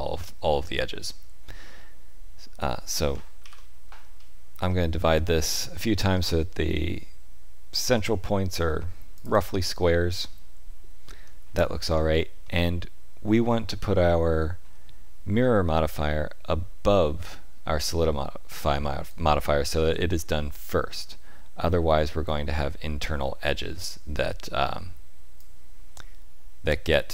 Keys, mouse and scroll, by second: 3.4 ctrl+r, 11.8 Tab, 12.4 middle click, 19.0 click.